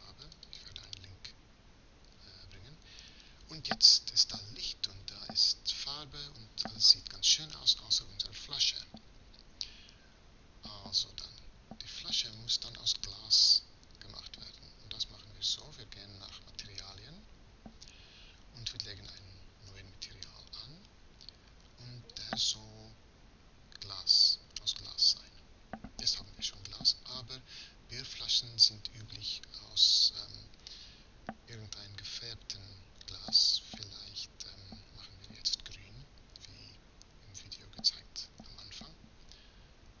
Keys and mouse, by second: 0.4-14.2 drag, 18.5-40.0 drag.